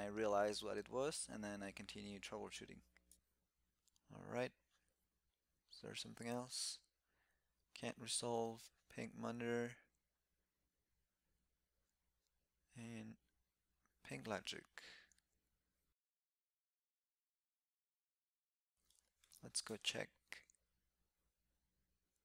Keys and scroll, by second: 16.0 super+p, 19.4 shift+super+e.